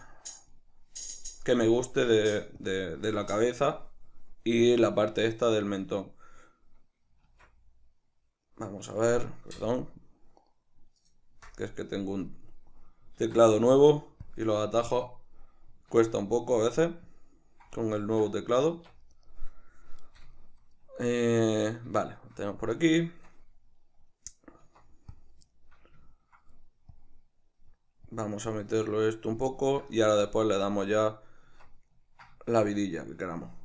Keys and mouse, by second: 0.0-3.2 drag, 3.2-17.0 shift+middle drag, 13.3 alt+q, 15.9 alt+q, 17.0-19.1 drag, 18.0 ctrl+z, 18.7 Tab, 19.1 right click, 20.4-25.3 shift+middle drag, 24.7 Tab, 25.5-26.9 shift+middle drag, 26.9-29.5 drag, 29.5-31.9 ctrl+middle drag, 31.5 Tab, 32.4-33.6 shift+middle drag.